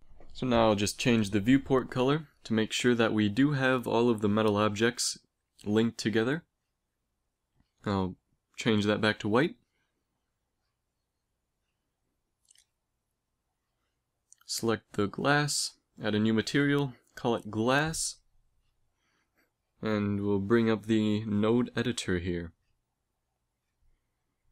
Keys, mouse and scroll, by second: 3.6-6.1 middle drag, 6.1-9.7 drag, 11.3-12.3 middle drag, 13.4-16.6 drag, 14.5-16.6 right drag, 16.6 s, 19.8 click, 23.8 click, 24.3 x.